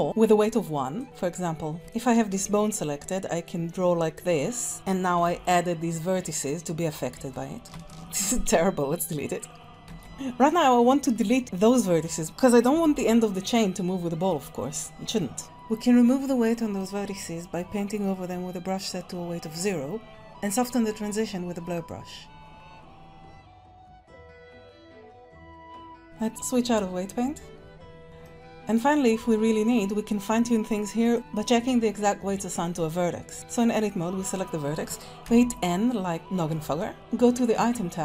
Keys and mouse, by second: 1.9 ctrl+click, 3.1-4.7 drag, 5.2 r, 12.2 r, 12.7 r, 17.0 click, 19.7 click, 22.0-23.4 drag, 23.8 click, 24.0 middle click, 24.7 click, 25.6 middle click, 26.3-28.0 ctrl+drag, 28.2 middle click, 29.3 shift+middle click, 31.0 click, 35.2 n.